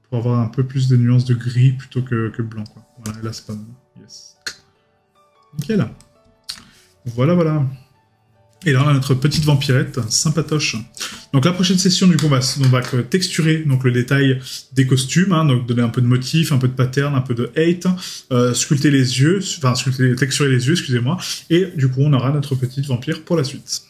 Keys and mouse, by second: 9.4 right click, 10.7 middle click.